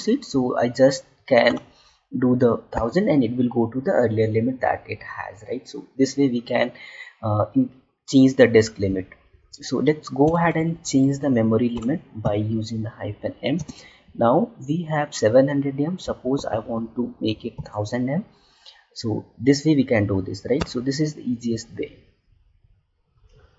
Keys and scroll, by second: 13.5 space.